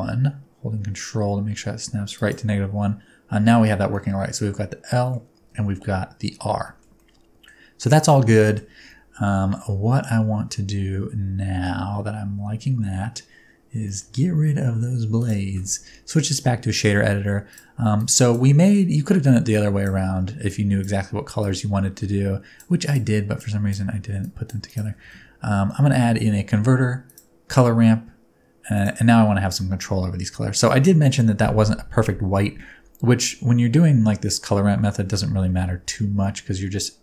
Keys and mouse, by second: 2.1 ctrl+click, 3.9-5.1 middle drag, 6.9 middle click, 8.4 shift+middle click, 9.6-11.6 middle drag, 13.3 Tab, 13.8 shift+middle click, 15.2 click, 16.1 middle click, 17.9-18.4 drag, 18.7 middle drag, 19.5 click, 20.5 click, 21.4-22.6 drag, 23.4 click, 24.2 click, 25.0 shift+a, 36.3-37.0 middle drag.